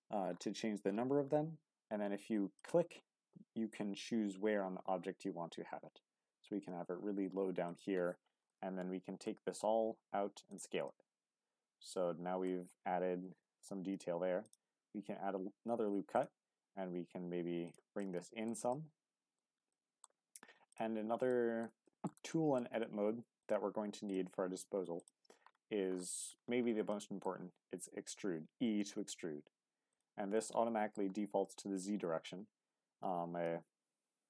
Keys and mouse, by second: 7.6 click, 8.5 middle click, 10.5 click, 10.8-12.5 middle drag, 13.4 ctrl+r, 16.1 click, 16.7 s, 17.6 click, 18.0 middle click, 18.7 middle click, 19.7 middle click, 21.3 middle click, 21.8 shift+middle click, 22.3 middle click, 23.4 shift+click, 24.0 shift+click, 26.9 middle click, 27.3 e, 29.9 click, 30.3 middle click, 31.4 middle click, 33.4 ctrl+z.